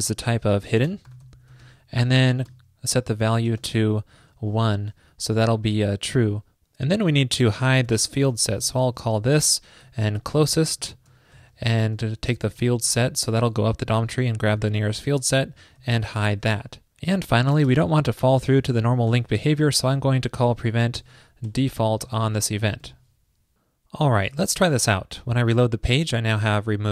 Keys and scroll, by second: 2.0 super+Right, 7.2 super+Return, 11.4 super+Right, 14.0 super+Right, 22.9 super+s.